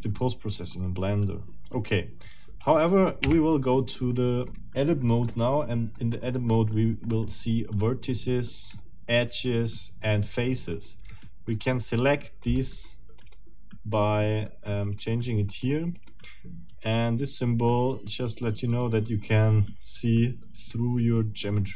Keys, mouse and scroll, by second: 3.2 Tab, 4.0 middle click, 5.3 middle click, 6.1 scroll up 2, 6.7 middle click, 8.5 middle click, 12.4 middle click, 13.2 middle click, 14.4 click, 14.8 click, 15.5 click, 16.0 click, 18.6 click, 19.2-21.7 middle drag.